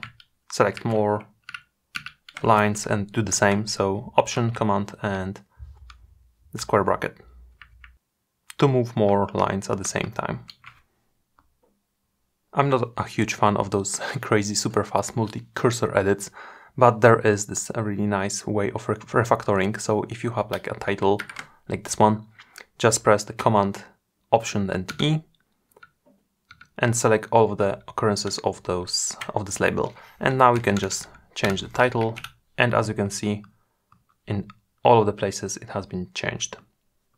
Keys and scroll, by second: 23.1 alt+super+e.